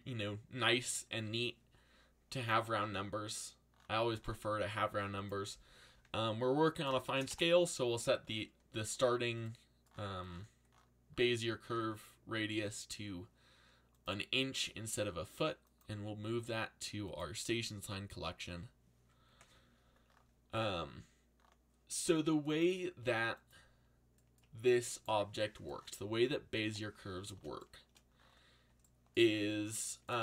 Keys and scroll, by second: 6.7 1, 7.0 shift+', 7.3 Return.